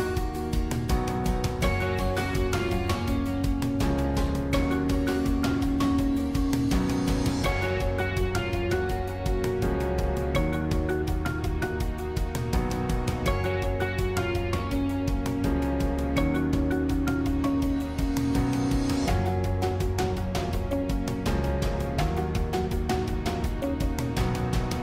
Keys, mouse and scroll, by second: 7.1 shift+click, 9.1-11.0 middle drag, 11.0 shift+click, 11.6 shift+click, 12.0-13.9 middle drag, 13.9 shift+click, 14.6 shift+click, 15.0-17.0 middle drag, 17.0 click, 17.7-20.4 middle drag, 20.4 click, 22.1 click, 24.2 g.